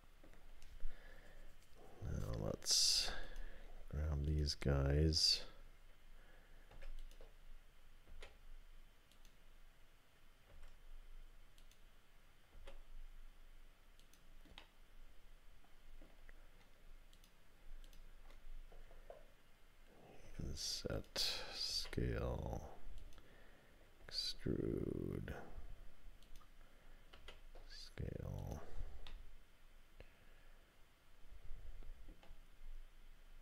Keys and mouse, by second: 3.2 click, 4.3 shift+click, 6.7 i, 8.1 s, 10.5 e, 12.5 s, 14.6-16.1 drag, 20.3 i, 21.7 s, 24.0 e, 27.2 s, 29.1-32.1 drag.